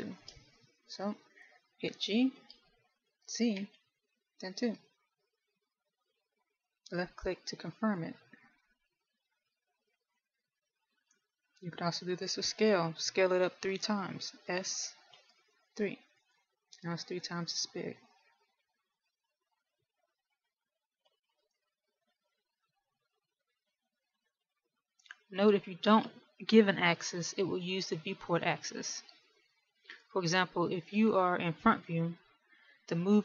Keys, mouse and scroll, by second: 0.5 shift+middle click, 3.6 g, 12.1 ctrl+z, 15.9 s, 18.1-22.1 scroll down 3, 22.5 ctrl+z, 23.5 shift+middle click, 24.8-32.1 scroll up 4.